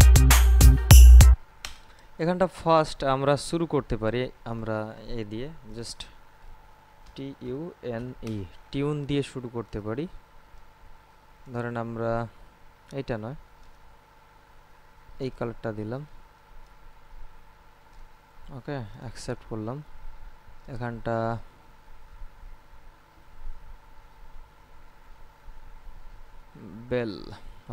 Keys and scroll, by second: 1.5 space, 6.9-8.6 typing.